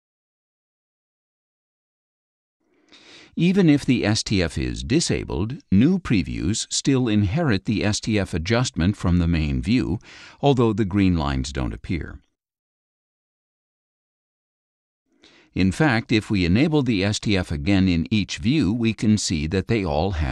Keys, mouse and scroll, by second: 1.4 click, 2.9 click, 5.5 click, 6.9 click, 8.4-9.4 drag, 10.0 click, 11.0-12.0 drag, 18.8 click.